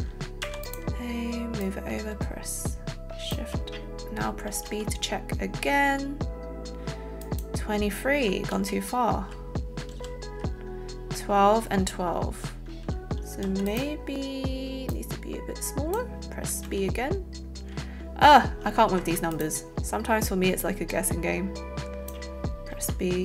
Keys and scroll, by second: 0.4 a, 4.6 b, 8.5 ctrl+z, 9.8 ctrl+z, 13.5 a, 16.8 b, 19.0 a.